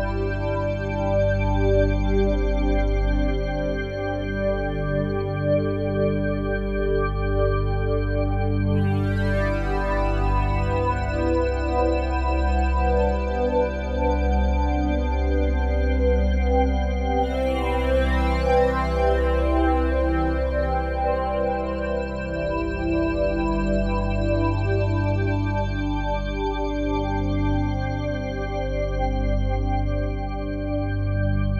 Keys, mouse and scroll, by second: 2.2 click, 3.8 click, 6.8-7.1 typing, 7.8 click, 10.6-11.3 alt+shift+drag, 13.9 Tab, 14.4 click, 15.6 g, 16.6 Escape, 17.1 click, 18.2 g, 20.8 click, 22.3 click, 22.8 alt+shift+click, 24.2-25.5 drag, 26.4 g, 27.4 Escape, 28.8 Tab, 30.8-31.5 alt+shift+drag.